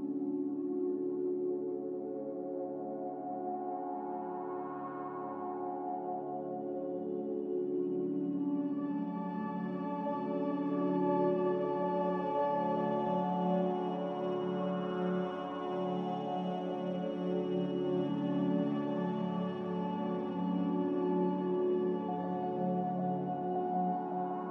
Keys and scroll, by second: 4.3 ctrl+c, 7.7 ctrl+v, 12.2 ctrl+g, 16.6 z, 18.4 s, 20.0 1, 21.9 0, 23.1-23.9 typing.